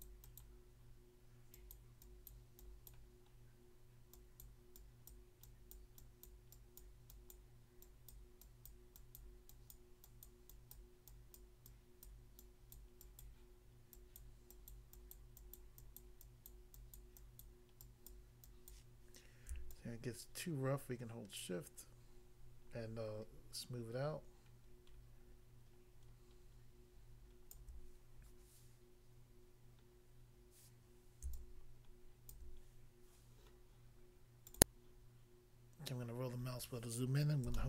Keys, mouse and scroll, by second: 0.0 double click, 0.2 double click, 0.4 double click, 1.6 click, 1.7 click, 2.0 click, 2.3 click, 2.6 click, 2.9 click, 3.3 scroll down 1, 4.1 click, 4.5 click, 4.8 click, 5.1 click, 5.7 click, 6.3 click, 6.8 click, 7.3 click, 8.1 click, 8.7 click, 9.3 click, 9.7 click, 10.7 click, 11.4 click, 12.1 click, 13.2 click, 14.1 click, 14.7 click, 14.9 click, 15.1 click, 15.5 click, 16.0 click, 16.5 click, 16.9 click, 18.1 click, 18.7 click, 19.7 shift+click, 31.3 shift+click, 34.5 click, 34.5 click, 34.6 click, 35.6 scroll up 1, 36.4-36.9 scroll up 1, 37.5 shift+middle click.